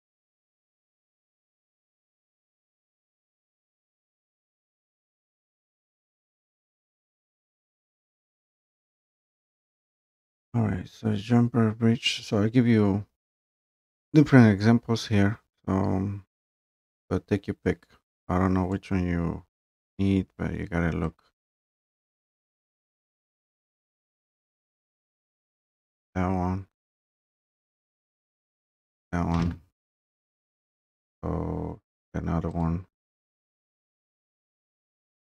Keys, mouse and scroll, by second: 0.5-1.1 scroll, 1.1-1.7 scroll down 10, 1.7 click, 2.1 click, 2.4 scroll down 3, 2.6 scroll up 3, 2.7 scroll down 1, 2.8 scroll up 1, 3.0 scroll down 2, 3.3 scroll up 1, 3.8 click, 10.1 scroll, 10.2 scroll up 1, 10.2 scroll down 2, 10.5-11.0 scroll, 14.7-15.0 scroll down 2, 16.4 Escape, 18.7 click, 21.8 click, 24.0 click, 25.9 click, 27.0 click, 28.6 Delete, 32.7 click.